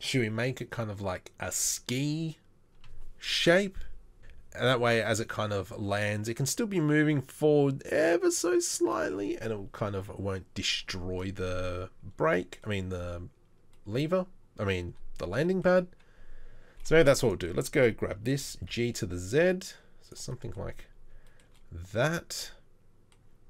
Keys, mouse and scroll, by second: 16.9 3, 18.5 g.